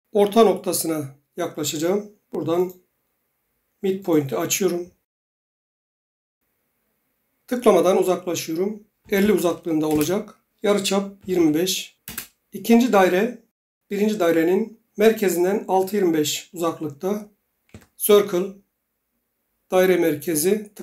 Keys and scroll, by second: 8.8-9.7 typing, 9.9 Return, 10.9-11.7 typing, 12.0 Return, 17.7 c, 18.1 Return.